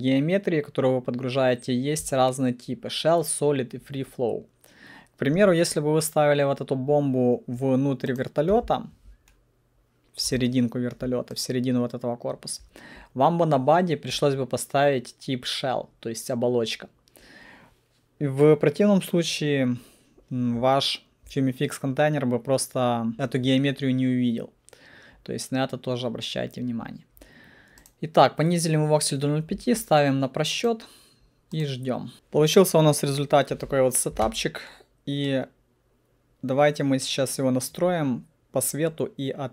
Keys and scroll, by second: 8.5 p.